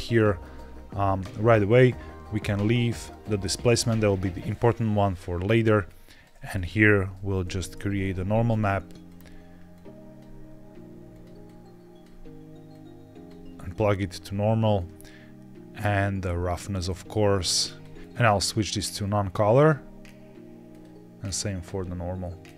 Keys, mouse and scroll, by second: 0.0 middle click, 2.5 click, 3.0 click, 5.4 click, 5.8 click, 6.3 click, 6.8 shift+a, 9.6-11.1 drag, 11.3 click, 12.6-13.2 drag, 13.6 click, 14.7-16.1 drag, 16.8 click, 18.0-19.6 drag, 20.6 click, 21.2 click, 22.3-22.5 drag.